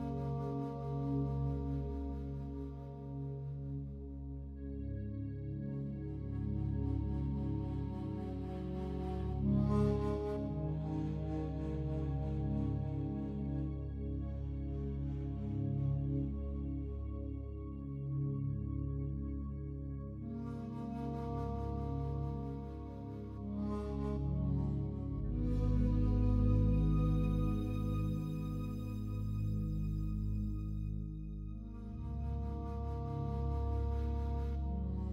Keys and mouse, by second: 4.5 ctrl+z, 5.0 ctrl+z, 5.8 ctrl+z, 6.2 ctrl+z, 6.5 ctrl+z, 9.5-11.1 drag, 11.2 alt+a, 11.6-12.6 alt+drag, 12.8-13.4 alt+drag, 13.8 ctrl+alt+click, 14.2-14.5 alt+drag, 15.1 ctrl+alt+click, 15.5 alt+click, 16.4 ctrl+s, 18.1 click, 19.6 click, 21.0 click, 21.6 click, 22.5 3, 22.9 Return, 26.4 click, 27.6 click, 27.9 click, 28.5 click, 28.7 click, 29.7 BackSpace, 29.9 BackSpace, 30.0 BackSpace, 30.2 5, 30.6 Return, 31.7 click, 32.1 click, 32.4 click, 33.8 click, 34.1 click, 34.7 click.